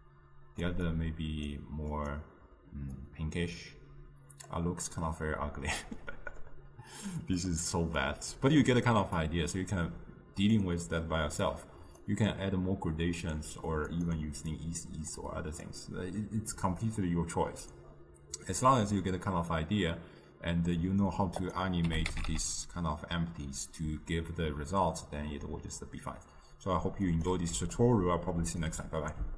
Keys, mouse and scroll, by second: 1.0-3.1 drag, 8.1 click, 11.5-18.1 drag, 21.6 click, 22.3 g.